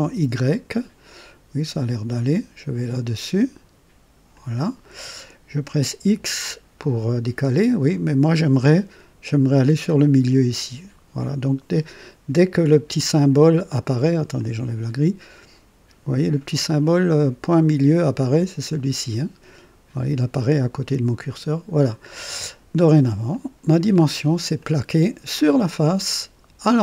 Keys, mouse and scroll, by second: 4.3 click, 5.9 x, 14.3 click, 21.2 click, 22.1-23.2 drag, 23.4 click, 24.0-24.5 scroll up 2, 24.5-26.8 drag.